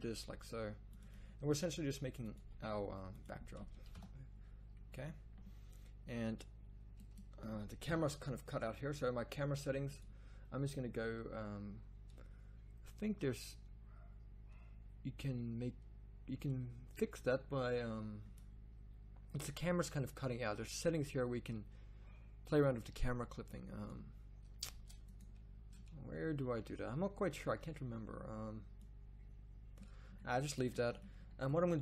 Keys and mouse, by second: 0.2 e, 1.4 e, 2.3 e, 3.9 KP_0, 7.8 KP_0, 24.7 Tab.